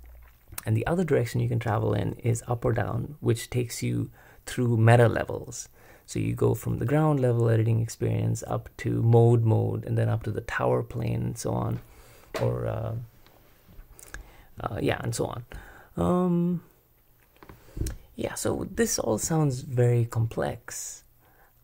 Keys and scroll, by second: 0.5 l.